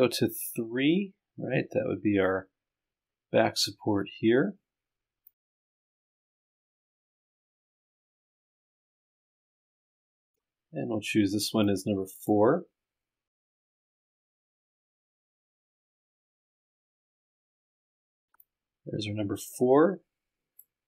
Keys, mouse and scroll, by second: 1.9 click, 3.2 click, 4.9 click, 5.3 scroll up 2, 6.8-7.7 scroll up 8, 8.0-8.8 scroll down 2, 17.1 click, 17.7 click, 18.4-20.3 drag.